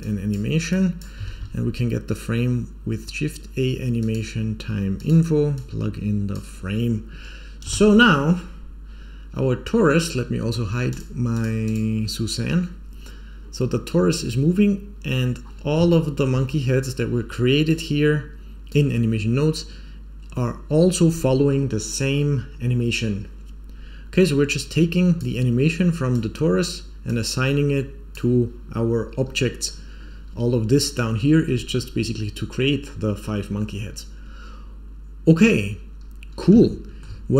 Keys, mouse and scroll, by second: 0.6 click, 1.2 shift+a, 5.5-6.3 drag, 7.6 space, 10.8 click, 11.3 click, 11.6 click, 12.8 scroll down 1, 13.2 scroll up 1, 15.4-15.8 scroll down 3, 15.8-16.2 shift+middle drag, 16.5-17.0 scroll up 2, 17.6-18.6 drag, 19.8 scroll up 1, 24.2-25.1 drag, 26.0-26.5 drag, 27.0-28.0 drag, 29.8-30.4 scroll up 2, 36.6 shift+middle click.